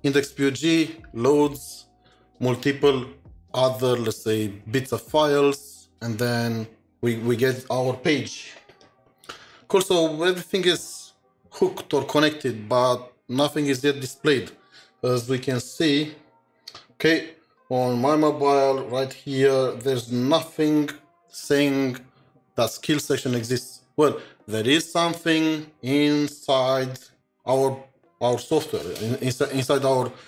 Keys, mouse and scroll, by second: 8.4 click, 8.4 ctrl+shift+7, 8.8 ctrl+shift+2, 15.4 ctrl+shift+7.